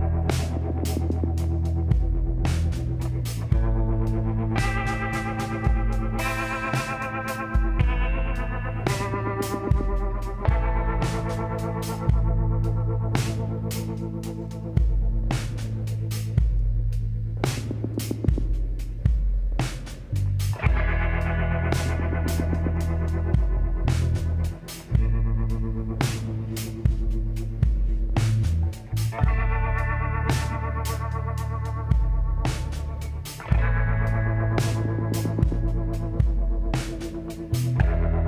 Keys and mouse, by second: 2.4-4.0 drag, 4.0 KP_7, 5.6 e, 8.8 e, 10.0 ctrl+z, 10.6 s, 14.2-15.9 drag, 15.9 s, 18.0-20.6 drag, 23.8-25.6 drag, 27.0 e, 29.8 a, 30.1 a, 31.3 ctrl+n, 33.6-36.9 drag, 34.1 middle click, 35.9 w.